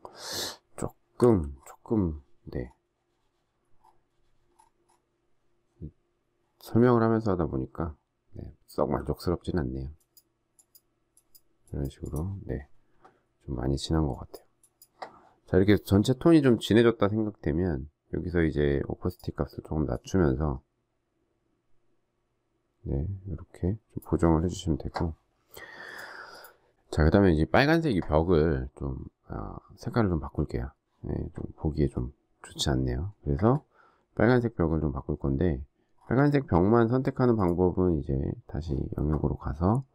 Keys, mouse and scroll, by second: 0.5 alt+scroll down 1, 1.5 alt+scroll down 1, 2.6 alt+scroll up 1, 3.8 alt+scroll down 1, 4.4 alt+scroll up 1, 7.6 alt+scroll down 1.